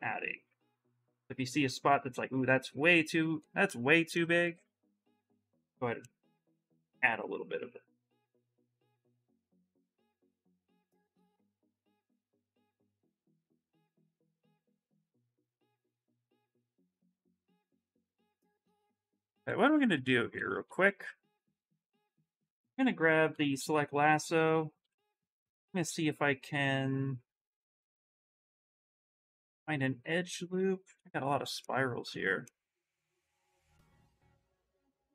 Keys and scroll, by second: 16.0 s, 17.8-20.8 typing, 21.8 s, 31.9 ctrl+z.